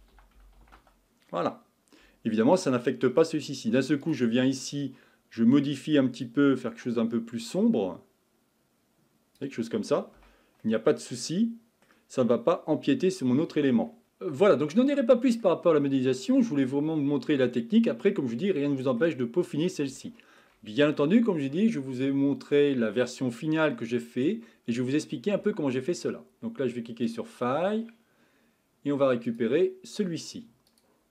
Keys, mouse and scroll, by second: 2.7-4.0 middle drag, 4.0 click, 10.2 Tab, 10.6-12.7 middle drag, 12.7-13.4 scroll up 5, 13.4-14.0 scroll down 5, 14.0-19.4 shift+middle drag, 19.4-20.0 scroll down 3, 20.0-31.1 shift+middle drag.